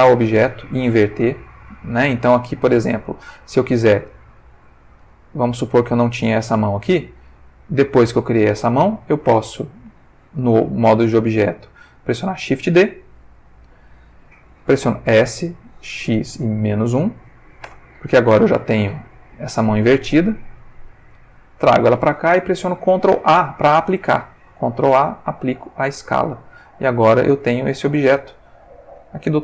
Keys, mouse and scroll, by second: 3.0 Tab, 3.9 Tab, 4.4-5.1 ctrl+middle drag, 5.5 click, 6.1 x, 6.6 click, 7.5 click, 11.6 shift+d, 12.8 Escape, 15.1 s, 16.1 x, 16.6 -, 16.8 1, 17.7 Return, 19.2 g, 21.1 click, 24.6 ctrl+a, 25.6 click, 26.8 click, 27.3 g, 27.9 click, 28.4 ctrl+middle click.